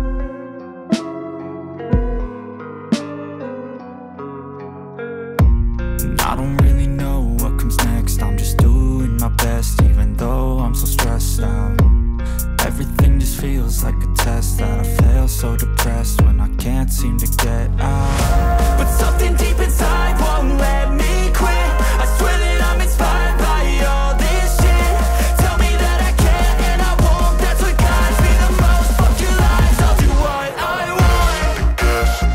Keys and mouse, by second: 2.5-2.9 shift+middle drag, 3.1-3.4 middle drag, 3.6 shift+middle click, 4.0 middle drag, 5.0 click, 5.7 shift+middle drag, 6.8 click, 7.3 middle drag, 8.0-8.4 shift+middle drag, 9.4-10.5 drag, 10.5 middle drag, 10.6 drag, 10.8-11.3 middle drag, 11.8 click, 12.3 middle click, 12.6 click, 15.0 click, 15.8-16.4 middle drag, 16.7 shift+middle click, 17.4 click, 18.6 shift+middle click, 18.9 shift+middle drag, 19.7 click, 20.7 drag, 20.9 middle click, 21.2 middle click, 21.5 shift+middle drag, 22.4 middle drag, 22.6-22.9 drag, 24.7-27.3 drag, 28.4-30.5 drag, 31.4 middle drag, 32.0 middle drag.